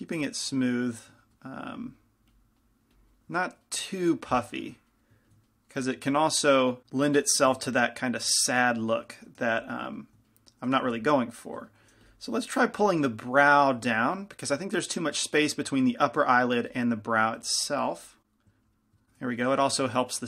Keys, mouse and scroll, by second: 2.1-3.4 middle drag, 3.6-8.7 middle drag, 9.6 g, 9.6 f, 10.9 f, 12.2 f, 13.3-16.8 drag, 13.3-14.7 middle drag, 14.1 f, 16.8 f, 17.7 f, 18.1 click, 18.6 middle click.